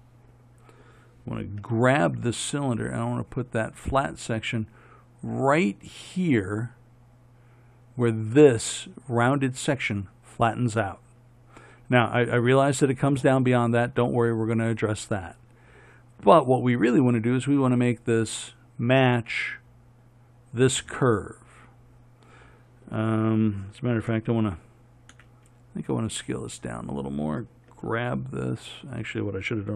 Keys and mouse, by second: 1.8 g, 25.4 s, 27.9 g.